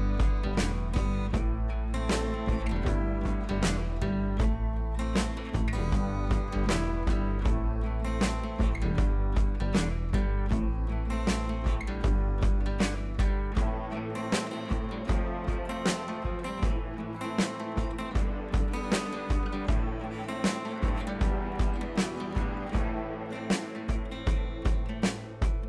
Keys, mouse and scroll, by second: 0.7 Right, 3.3 click, 7.8 t, 8.2 click, 8.5-9.1 scroll down 1, 9.1 click, 10.5-12.0 typing, 13.6 u, 14.1 ctrl+a, 14.8 click, 16.4 u, 17.3 ctrl+a, 18.6 click, 20.6-24.3 click.